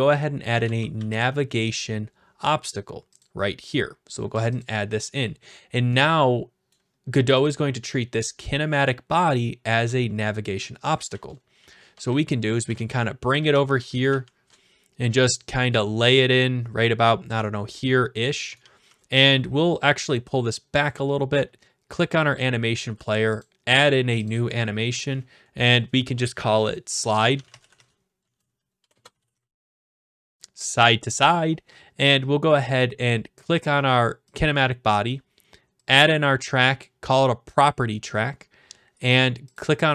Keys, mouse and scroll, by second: 0.3-1.6 typing, 3.2-4.3 drag, 6.0-6.7 typing, 6.7 right click, 7.4 click, 10.9-14.7 typing, 10.9 click, 14.5-15.7 right drag, 18.1-19.3 drag, 18.6 typing, 19.3 right click, 20.9 click, 23.4 click, 24.2 click, 27.1-30.3 typing, 34.3 click, 35.9 click, 38.6 click, 39.6-39.9 drag.